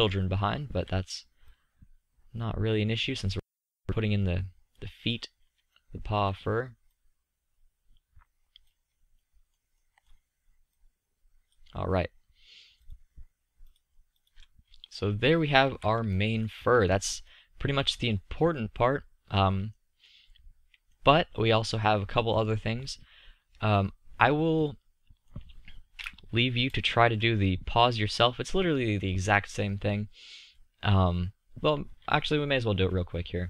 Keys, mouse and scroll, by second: 0.3-1.6 middle drag, 1.6-3.3 drag, 5.2 click, 7.4-8.7 drag, 9.2 click, 10.7-11.7 drag, 13.1-13.5 drag, 14.7-15.2 drag, 15.6 z, 19.2-19.7 middle drag, 25.9 KP_5, 31.5-33.4 middle drag.